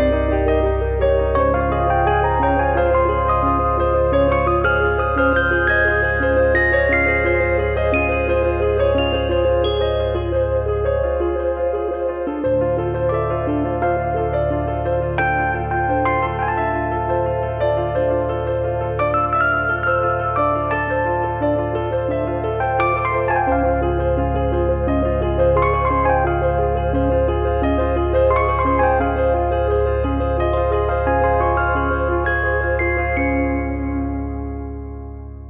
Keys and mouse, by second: 0.8 shift+middle click, 1.6 click, 2.7 click, 3.0 click, 3.8 click, 5.9 click, 6.8 click, 7.3 click, 7.9 click, 8.7 click, 9.6 click, 10.5 click, 11.2 click, 11.8 click, 12.2 middle click, 12.6 middle click, 12.9 middle click, 14.6 middle click, 15.4 click, 15.8 click, 17.6 click, 18.8 click, 19.4 click, 22.3 click, 23.0 click, 23.4 shift+middle click, 23.8 middle click, 24.6 click, 25.0 click, 26.2 click, 27.1 click, 27.6 click, 28.3 click, 28.6 click, 29.4 click, 33.8 middle click, 34.4 click.